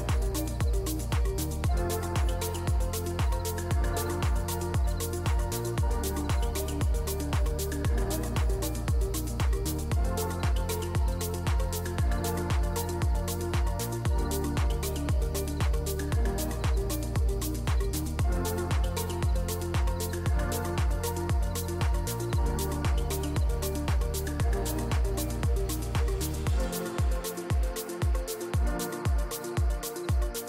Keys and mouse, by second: 0.6 ctrl+z, 0.8 ctrl+z, 1.5 z, 2.2 Tab, 3.0-3.6 middle drag, 4.1 shift+middle drag, 4.3 middle click, 5.0 middle click, 6.3 ctrl+p, 7.8 shift+middle drag, 8.4 click, 8.7 shift+middle click, 9.1-9.9 middle drag, 10.1 shift+middle click, 10.3 middle drag, 11.6 Tab, 11.9 3, 12.5 alt+click, 12.9 middle click, 13.7 alt+s, 16.7 Tab, 17.1 middle drag, 17.6 middle drag, 18.2 middle click, 18.4 shift+middle drag, 18.7 middle drag, 19.5 shift+s, 20.6 drag, 21.8 ctrl+p, 23.0 g, 24.6 shift+middle drag, 24.9 click, 25.1 middle drag, 25.3 shift+middle click, 25.6 click, 26.0 shift+a, 27.6 click, 27.8 shift+a, 29.5 shift+a.